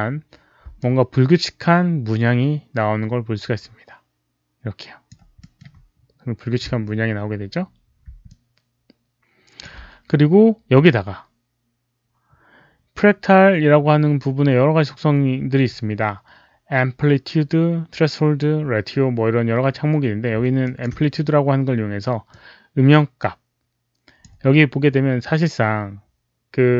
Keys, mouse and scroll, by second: 0.7-5.0 alt+drag, 5.3 alt+middle click, 8.2-9.5 alt+drag, 8.7 alt+middle click, 11.5 alt+click, 11.5 alt+middle click, 14.2 alt+click, 14.2 alt+middle click, 15.0 alt+click, 15.0 alt+middle click, 20.5 alt+click, 22.2-24.5 alt+drag.